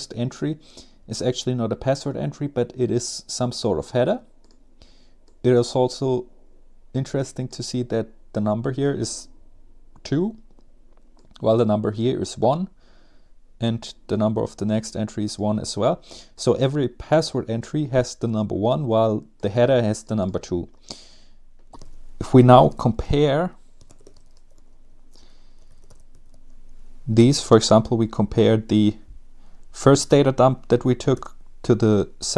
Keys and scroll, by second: 21.7-27.9 typing, 28.1 Tab, 30.7 Return.